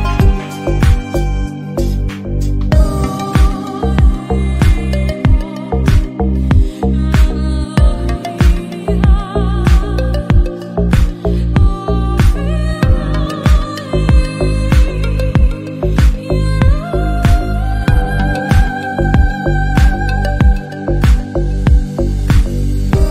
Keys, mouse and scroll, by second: 0.2 k, 0.9 k, 1.9 shift+click, 2.7 Delete, 2.9 middle click, 3.7 scroll down 1, 3.9 Tab, 4.3 /, 4.5 KP_3, 4.8 g, 5.4 shift+middle click, 5.5 scroll up 4, 5.6 shift+middle click, 5.7 shift+middle click, 6.0 scroll down 1, 6.2-6.6 middle drag, 6.6 alt+z, 6.7-7.3 middle drag, 7.3-7.9 scroll down 1, 8.7 scroll down 3, 8.9 click, 9.4 Tab, 9.7-12.2 typing, 10.0 alt+z, 12.7-13.5 scroll up 5, 12.8 shift+middle click, 13.0 shift+middle click, 13.5 scroll down 5, 13.7 alt+s, 14.4 s, 14.8 middle click, 15.0 scroll down 1, 15.2-16.1 scroll up 3, 15.3 shift+middle click, 15.5 alt+z, 16.1 middle click, 16.6 scroll up 1, 16.9 Tab, 16.9 click, 17.1 Tab, 17.4 alt+z, 17.5 click, 18.3 g, 18.7 a, 19.0 g, 19.6 alt+z, 19.8 middle click, 21.0 alt+z, 21.1 click, 21.9 g, 22.4 middle click, 22.6 alt+z, 22.9 shift+middle click, 23.0 scroll up 1.